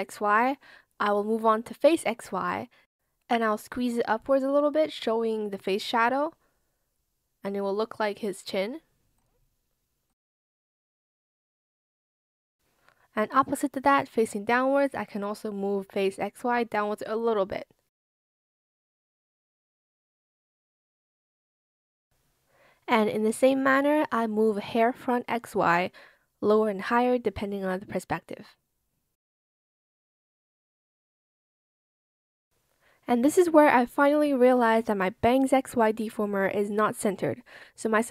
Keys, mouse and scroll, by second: 0.0 shift+click, 2.8 ctrl+z, 5.5 shift+click, 9.4 shift+click, 10.2 shift+click, 12.9 shift+click, 16.1 shift+click, 17.0 shift+click, 18.6 ctrl+z, 19.1 shift+click, 20.7 shift+click, 21.1 shift+click, 21.4 shift+click, 21.7 ctrl+z, 28.6 ctrl+z, 31.1 ctrl+z, 32.2 shift+click.